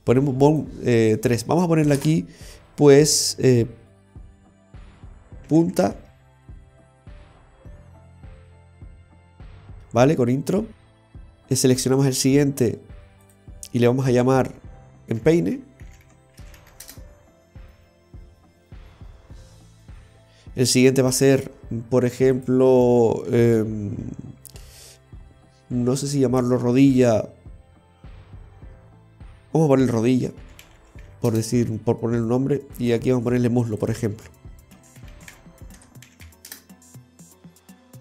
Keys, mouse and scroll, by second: 0.6 click, 2.6 l, 6.7 BackSpace, 8.3 BackSpace, 10.3 e, 11.1 right click, 13.3 click, 21.2 right click, 22.4 click, 30.9 click, 32.9 right click, 33.9 click.